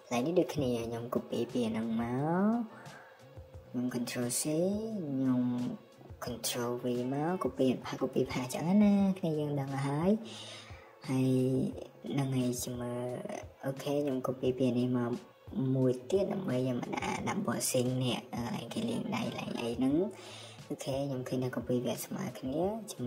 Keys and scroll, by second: 2.9 ctrl+c, 5.6 ctrl+v, 7.1 BackSpace, 8.5 Escape, 12.8-13.2 typing, 18.1 Escape, 18.3 Escape, 22.1 m.